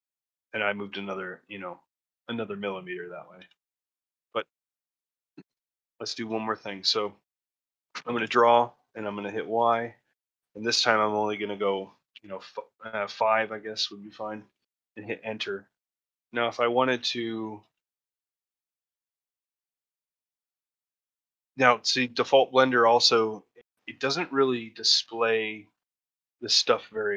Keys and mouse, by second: 5.2 ctrl+middle click, 5.4 shift+middle click, 5.9 click, 6.3 ctrl+shift+middle click, 6.8 shift+middle click, 15.0 middle click, 15.3 shift+middle click, 16.6 alt+middle click, 17.3 shift+middle click, 17.6 ctrl+middle click, 19.6 ctrl+middle click, 21.0 shift+middle click, 21.3 middle click, 21.9 ctrl+middle click, 24.5 middle click, 25.0 shift+middle click.